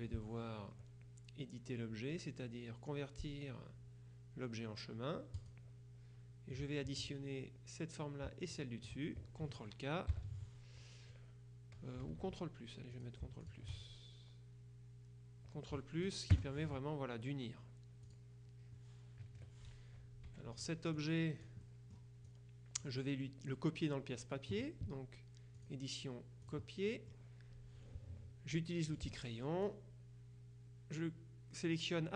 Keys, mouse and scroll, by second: 0.0 F2, 5.5 click, 8.6 shift+click, 10.2 ctrl+k, 12.2 ctrl+z, 13.1 shift+click, 16.5 ctrl+KP_Add, 18.1 click, 19.3 KP_Subtract, 20.3 F1, 20.7 click, 21.7 click, 25.6 click, 26.5 click, 28.9 click, 29.8-32.1 drag.